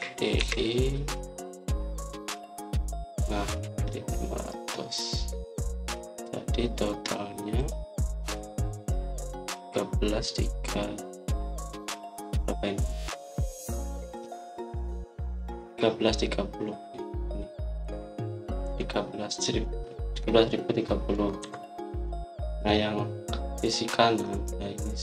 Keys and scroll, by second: 0.5-1.3 typing, 19.5 Escape, 22.3 Escape.